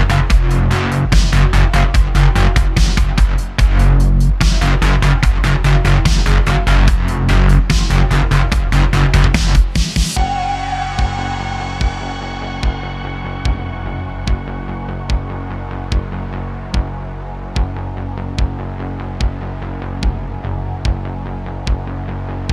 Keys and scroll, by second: 1.7 `, 4.9 s, 5.4 `, 6.9-8.7 typing, 11.2 `, 15.6 shift+a, 16.9 s, 17.8 ., 18.5 s.